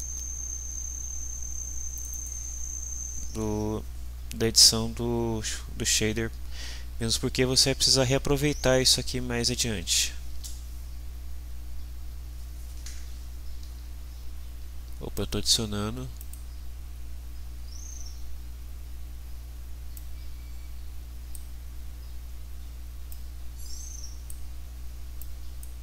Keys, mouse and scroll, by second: 1.9 click, 9.4-10.3 typing, 10.4 Return, 15.2 click, 16.2 click, 19.9-21.5 drag, 23.1-24.4 drag, 25.2-25.8 drag.